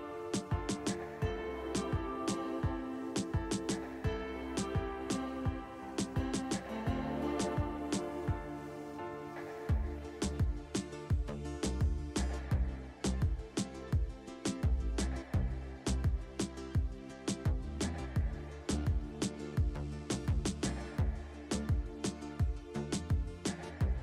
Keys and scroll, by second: 0.0 alt+w, 0.5 alt+w, 2.0 alt+w, 2.6 alt+w, 4.4 alt+w, 21.2 alt+w, 22.1 alt+w.